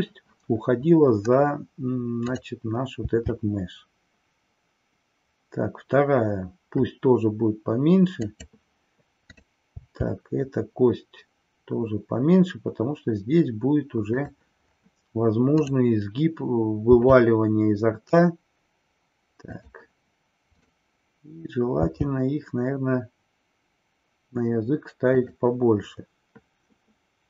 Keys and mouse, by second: 8.3 click, 9.3 click, 14.2 click.